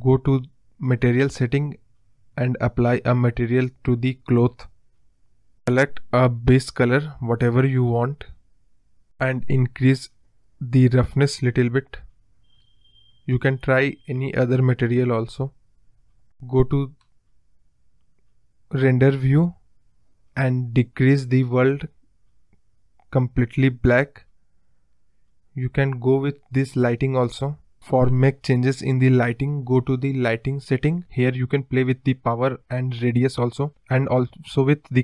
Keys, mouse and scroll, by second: 0.0 click, 0.9 click, 1.6 click, 2.8-3.6 scroll down 12, 3.6-4.4 scroll up 4, 4.4 click, 8.5 click, 9.9 scroll up 1, 10.2-11.4 scroll down 1, 11.7-13.2 drag, 19.0 click, 22.0 click, 22.6 click, 27.1 click, 27.4 click, 29.7 click, 30.7 click, 34.4-35.0 drag.